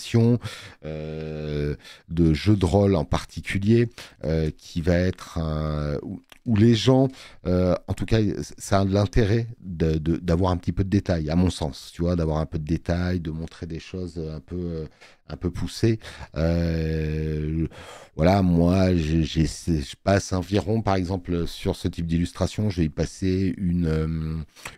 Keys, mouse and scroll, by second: 0.0 e, 1.6 b, 14.8 click, 21.1 click.